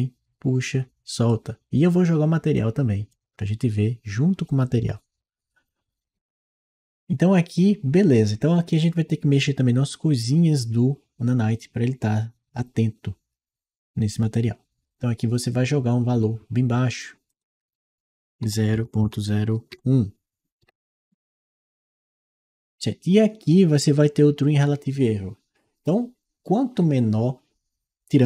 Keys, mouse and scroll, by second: 2.4 click, 17.1 click, 18.6-20.1 typing, 20.5 Return.